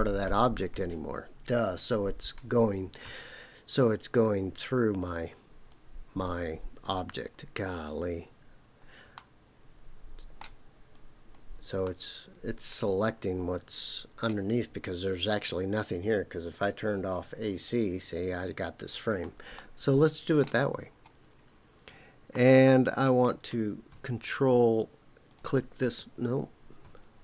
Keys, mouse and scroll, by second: 4.2 ctrl+click, 5.7 ctrl+click, 7.1 ctrl+click, 9.1-10.4 middle drag, 10.9 ctrl+click, 11.8-14.2 middle drag, 17.5 click, 19.5 shift+middle click, 21.3 scroll up 1, 22.3 middle click, 25.3 ctrl+click.